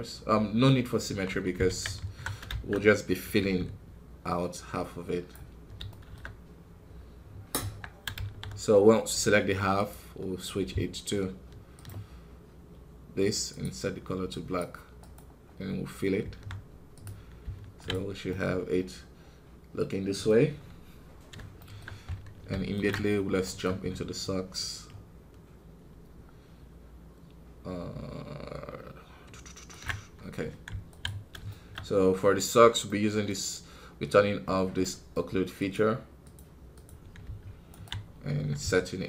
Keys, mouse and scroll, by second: 1.2 Tab, 1.6 alt+a, 2.4 shift+z, 5.2 b, 5.8-7.5 shift+middle drag, 7.5 Tab, 8.1 shift+z, 9.7-11.8 drag, 11.8 space, 14.2 click, 15.1-17.8 drag, 17.8 z, 18.2-20.4 middle drag, 20.4 KP_1, 21.5-22.8 shift+middle drag, 22.8 ctrl+Tab, 23.3-29.7 right drag, 30.9 z, 31.4 shift+middle click, 31.8-35.1 scroll up 1.